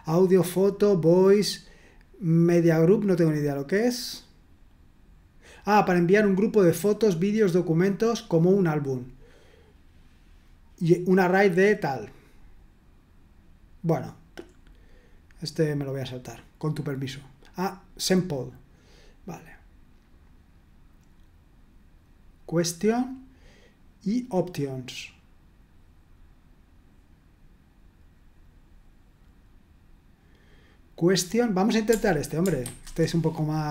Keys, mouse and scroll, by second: 3.3 click, 16.1-16.8 scroll down 2, 17.7 click, 32.8 super+1, 33.5 click.